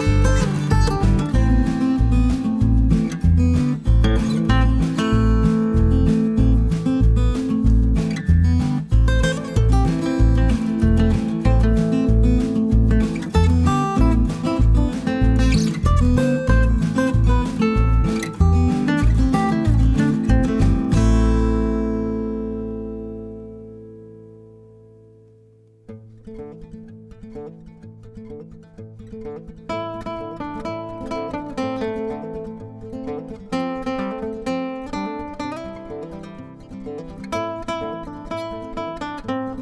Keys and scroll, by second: 1.7 Page_Down, 2.8-3.7 typing, 4.9 b, 11.7 F7, 17.4 b, 23.7 b, 33.7 F7.